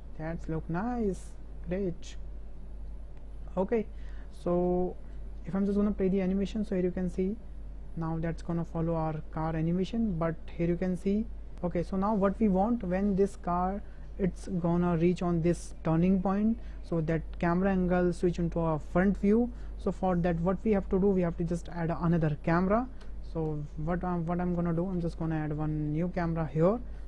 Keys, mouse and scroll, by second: 4.5 KP_0, 6.1 space, 9.0 space, 10.7-11.5 drag, 12.0 space, 23.0 KP_0, 24.0 shift+click, 25.0 shift+drag, 25.7 shift+drag, 26.8 shift+click.